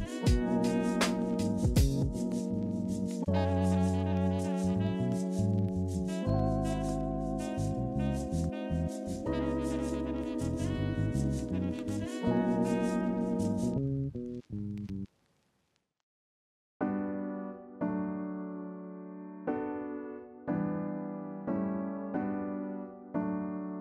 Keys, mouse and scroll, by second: 5.4 ctrl+g, 11.0-11.6 ctrl+[, 11.7 ctrl+], 11.9 ctrl+], 12.1 ctrl+], 12.4 ctrl+], 12.6 ctrl+], 12.9 ctrl+], 13.1 ctrl+], 13.3 ctrl+z, 13.3 alt+scroll, 15.6 ctrl+c, 15.8 ctrl+f.